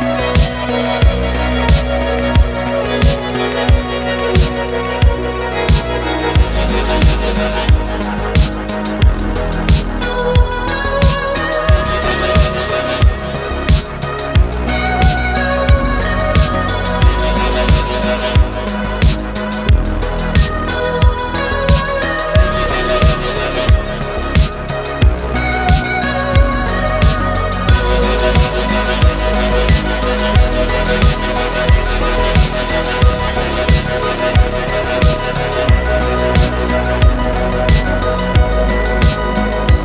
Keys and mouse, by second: 0.3 middle click, 2.1-2.4 middle drag, 3.4 middle click, 4.2-4.7 middle drag, 5.0 e, 5.2 x, 7.0 click, 7.2 middle click, 7.8 click, 8.1 middle click, 9.1 alt+p, 11.4 alt+p, 12.9 middle click, 13.4 middle click, 14.4 click, 15.3 alt+p, 17.1 alt+p, 18.8 shift+middle drag, 18.9 shift+click, 19.6 shift+click, 20.0 middle click, 20.5 click, 21.8 click, 22.2 middle click, 23.1-26.5 drag, 27.1 click, 28.1 middle click, 28.9 click, 29.6-33.9 shift+drag, 34.1 click, 36.7-37.4 middle drag, 38.6 KP_3.